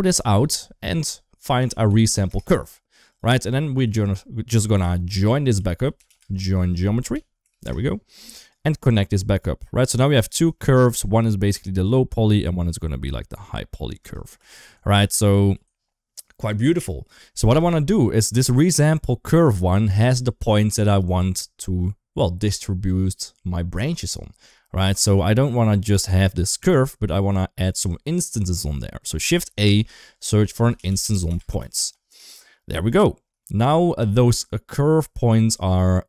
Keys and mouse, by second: 3.3 middle click, 3.6 shift+a, 9.2 click, 9.4-10.0 drag, 10.4 shift+middle click, 11.8-13.8 shift+drag, 14.2 z, 15.3 ctrl+z, 18.7-19.2 drag, 25.1 click, 29.0 shift+a, 33.3 shift+middle click.